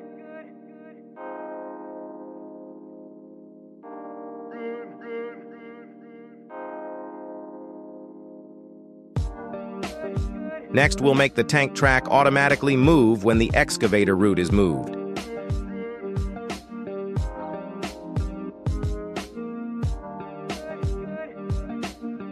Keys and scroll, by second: 0.3 Escape, 4.2 g, 4.8 Escape, 10.8 g, 11.1 y, 12.9 Escape, 13.3 y, 19.5 Escape.